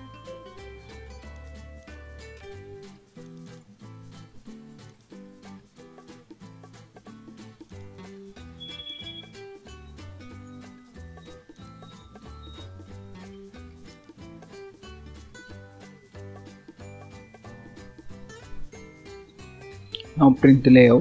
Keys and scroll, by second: 15.8 ctrl+s.